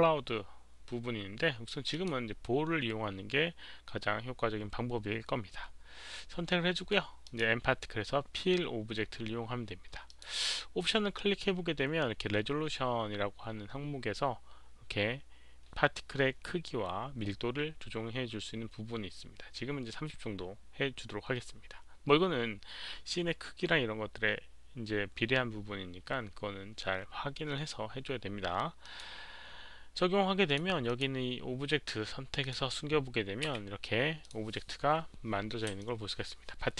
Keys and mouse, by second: 1.9 click, 7.2 click, 10.1 click, 18.1 click, 28.8 click, 30.4 click, 30.8 click, 32.4 click, 33.5 h, 34.2 click, 34.2 h, 35.6 alt+h, 35.8-36.7 alt+drag.